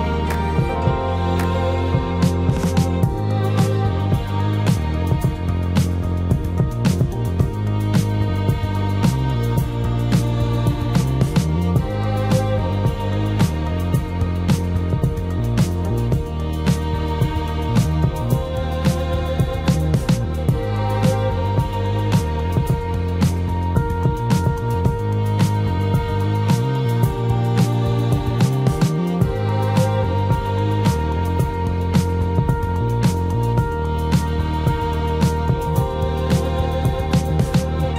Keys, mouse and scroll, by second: 0.1 shift+click, 0.7 shift+middle click, 2.0 /, 5.6-6.4 typing, 7.4 space, 12.3 space, 20.9 Escape, 31.2 Delete, 32.4 Delete, 33.9 shift+middle click.